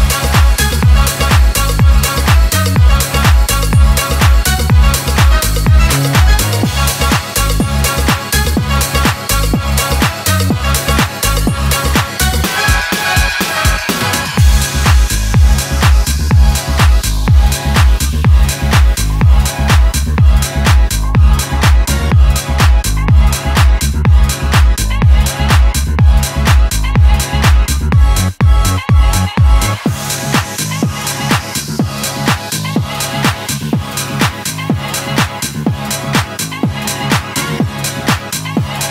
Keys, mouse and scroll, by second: 1.1 p, 2.0-7.3 drag, 9.6 scroll down 1, 11.4 click, 13.2-15.1 scroll up 1, 15.2 click, 16.5 scroll down 1, 17.4 click, 17.8-18.9 scroll down 1, 18.9 click, 20.7 right click, 21.6-23.6 drag, 29.2-30.2 scroll up 1, 30.2-30.8 middle drag, 32.3-33.5 drag, 33.8 ctrl+z, 35.1-37.3 drag, 37.3-37.7 scroll down 1, 37.7-38.4 middle click, 38.5-38.9 drag.